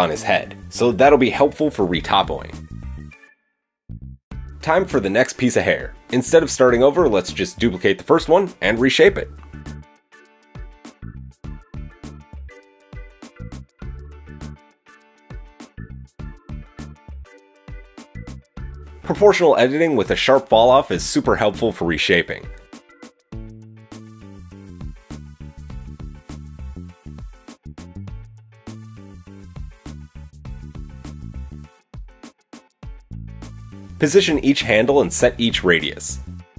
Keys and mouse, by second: 1.8 KP_3, 4.7 click, 8.2 shift+d, 14.5 Tab, 15.5 click, 16.4-17.8 middle drag, 17.8-18.9 drag, 19.0-19.4 drag, 23.7 g, 29.4 middle click, 31.4 click, 32.4-33.6 middle drag, 33.6 click, 34.8 shift+click.